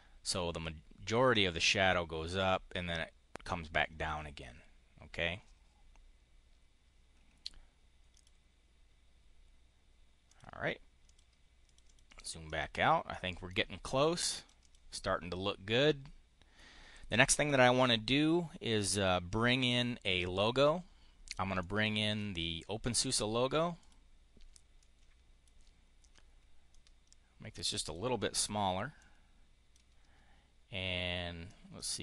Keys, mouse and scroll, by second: 7.9 click, 10.1 click, 10.9 click, 11.5 click, 11.7 click, 12.3 click, 12.9 click, 14.2 click, 15.5 click, 21.4 click, 23.6 click, 24.7 click, 26.5-27.5 ctrl+drag, 27.7 click, 28.8 click, 31.3-32.0 drag.